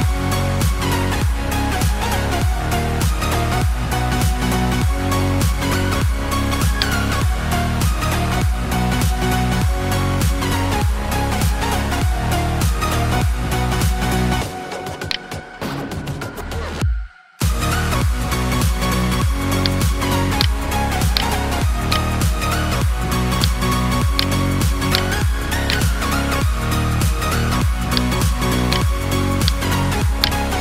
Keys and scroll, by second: 0.0 ctrl+shift+i, 0.2 ctrl+shift+\, 1.9 ctrl+z, 2.6 ctrl+alt+z, 4.7 F9, 16.1 alt+BackSpace, 17.5 ctrl+d, 20.4 ctrl+space, 20.9 ctrl+space, 22.0 space, 23.5 space.